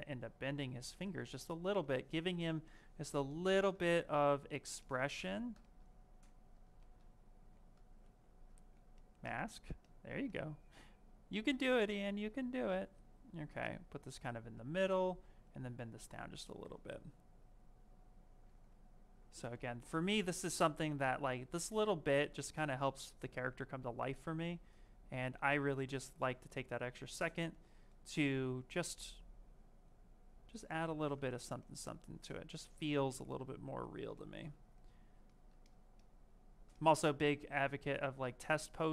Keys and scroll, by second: 4.0 ctrl+z, 6.0 ctrl+z, 7.3 ctrl+z, 7.9 ctrl+shift+z, 8.5 ctrl+z, 18.3 q.